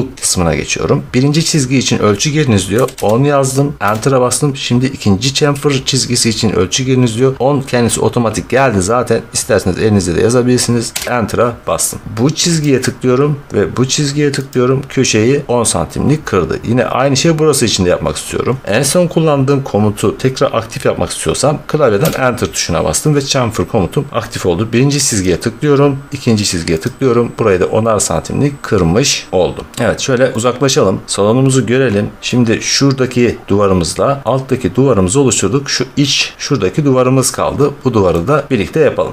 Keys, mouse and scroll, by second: 2.7 typing, 10.8 Return, 12.5 click, 14.4 click, 21.9 Return, 25.1 click, 26.7 click, 28.6 middle click, 28.6-29.0 scroll, 29.6 middle click, 29.7 scroll, 30.6 middle click, 30.7-32.9 middle click, 30.8-31.1 scroll, 32.1 middle click, 34.2 middle click, 38.0 middle click, 38.5 middle click, 38.7 middle click, 38.8-39.1 scroll.